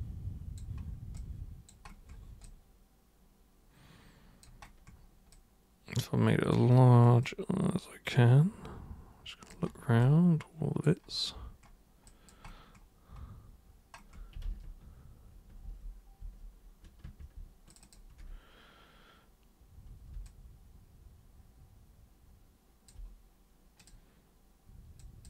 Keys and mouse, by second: 1.1 alt+super+click, 2.4-4.4 alt+super+drag, 5.3-6.5 alt+super+drag, 7.2-9.5 alt+super+drag, 10.0 alt+super+click, 12.1 alt+super+click, 14.4 ctrl+super+z, 15.6 ctrl+super+z, 16.2 ctrl+super+z, 17.7 ctrl+shift+super+click, 17.8 ctrl+shift+super+click, 20.3-22.9 alt+super+drag, 23.8 super+click, 25.0 super+click.